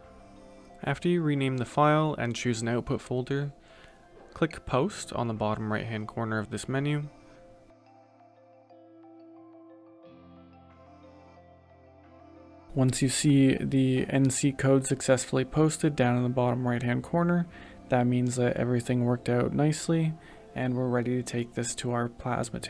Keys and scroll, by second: 3.6-6.9 typing.